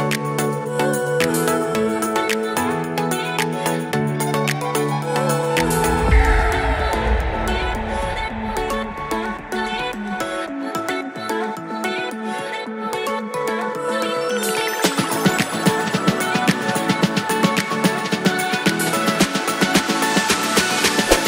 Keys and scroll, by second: 7.4 super+Right, 7.7 super+s, 10.8 super+s, 11.3 super+s.